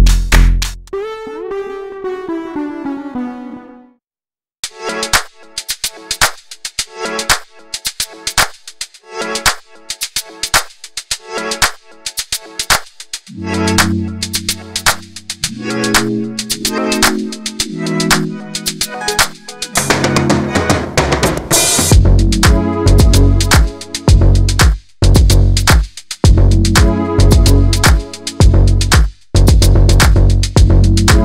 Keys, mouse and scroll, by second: 0.3 shift+middle click, 1.1 2, 1.3 click, 1.6 3, 1.7 click, 2.4 i, 5.3 middle click, 5.7 /, 5.8 middle click, 6.6 click, 7.1 i, 8.2 ctrl+z, 8.6 x, 9.4 scroll down 3, 9.5 middle click, 9.9-10.2 scroll up 1, 10.2 Tab, 10.4-11.3 right drag, 11.3 scroll up 1, 11.4-11.9 shift+middle drag, 11.9 Tab, 12.5 ctrl+r, 14.5 Tab, 14.7 scroll down 2, 14.7-15.1 middle drag, 15.1 scroll up 2, 15.3-15.8 shift+middle drag, 15.8 Tab, 16.5 click, 16.9 2, 17.5 alt+click, 17.7 middle click, 18.3 g, 19.9 Tab, 20.5 click, 20.6 scroll down 1, 20.9-21.2 middle drag, 21.2 scroll up 1, 21.4 middle click, 22.0 click, 22.2 Tab, 22.7 g, 23.3 g, 24.1 g, 25.6 Tab, 26.2 scroll down 2, 26.3 middle click, 26.5 drag, 26.7 scroll up 2, 26.8 click, 27.0 Tab, 27.4-28.5 middle drag, 28.6 click, 29.1 i, 29.9 Tab, 30.0 scroll down 2, 30.1-30.6 middle drag, 30.6 /, 30.7 scroll down 2, 30.9-31.2 middle drag.